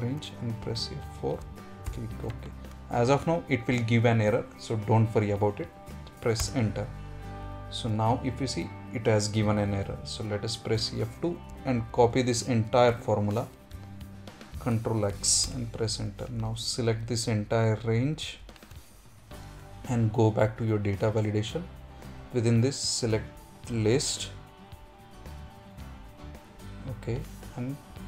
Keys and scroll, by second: 10.6 F2, 14.0 ctrl+x, 15.4 Return.